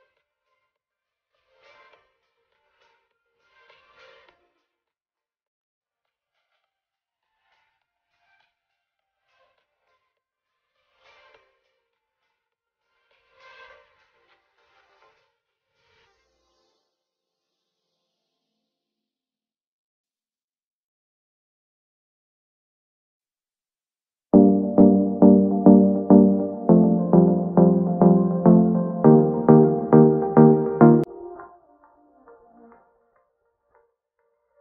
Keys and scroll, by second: 6.2 shift+space, 15.6 ctrl+z, 28.8 ctrl+z.